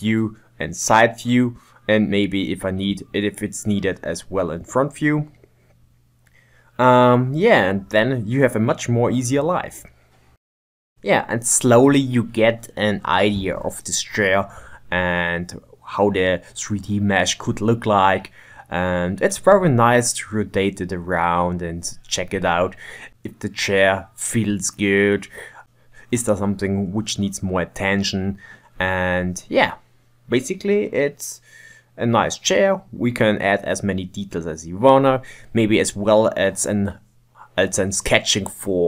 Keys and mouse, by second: 0.9 middle click, 1.3 Tab, 1.7 g, 2.1 ctrl+Tab, 2.3 ctrl+Tab, 2.7 ctrl+middle click, 2.9 n, 3.5 shift+right click, 3.8 click, 4.7 ctrl+z, 4.9-7.7 drag, 7.7 middle click, 7.9 KP_1, 8.3 b, 8.5 ctrl+z, 8.8 click, 8.9 ctrl+Tab, 9.5-9.9 shift+middle drag, 9.9-13.5 typing, 10.7 shift+middle click, 11.1 shift+middle click, 13.3 middle click, 13.9 click, 14.1 shift+right click, 14.3 ctrl+Tab, 14.4 click, 14.6 shift+right click, 14.7 click, 15.0 click, 15.5 shift+right click, 15.7 click, 16.5 middle click, 17.6 shift+right click, 17.7 shift+middle click, 17.9 ctrl+right click, 18.3 KP_1, 18.5 ctrl+right click, 19.3 shift+right click, 19.7 click, 20.3 shift+middle click, 21.1 b, 21.3 ctrl+Tab, 21.5 click, 22.1 click, 22.3 click, 22.5 click, 22.7 r, 22.9 g, 23.3 middle click, 23.5 ctrl+Tab, 23.9 ctrl+shift+middle click, 24.5 KP_3, 24.7 shift+middle click, 25.6-26.9 drag, 26.4 middle click, 26.9 shift+right click, 27.3-29.3 drag, 29.3 KP_7, 29.5 shift+middle click, 29.9 shift+right click, 30.5 shift+middle click, 30.7 click, 31.1 shift+middle click, 31.2-32.5 drag, 32.5 middle click, 32.9 KP_7, 33.2-35.0 drag, 35.0 middle click, 35.7 shift+middle click, 36.1 shift+right click, 36.5 shift+middle click, 36.7 click, 36.9 middle click, 37.7 click, 38.5 KP_7, 38.5 middle click.